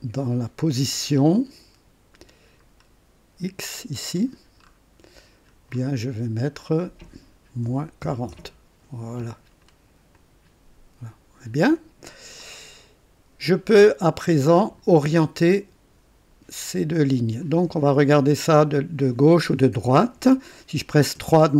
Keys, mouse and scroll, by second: 2.7-3.0 scroll down 1, 3.7-4.0 scroll down 1, 4.2-5.6 scroll down 5, 6.1-6.7 scroll down 4, 7.6 KP_Subtract, 8.0-8.3 typing, 10.1 click, 11.7 click, 12.4-14.7 drag, 12.9 typing, 21.1 KP_3.